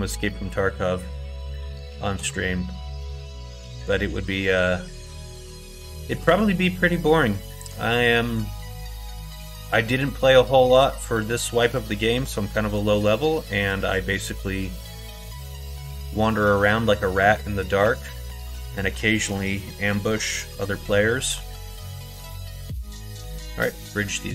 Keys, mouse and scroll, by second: 0.2 middle click, 1.5 middle click, 2.1 x, 6.1 middle click, 6.7 middle click, 7.5-9.6 middle drag, 10.6 click, 12.1 x, 13.5 middle click, 14.4 middle click, 15.3 middle click, 17.0 middle click, 17.7 2, 18.7 click, 19.8 click, 20.5 middle click, 21.1 middle click, 23.2 ctrl+e.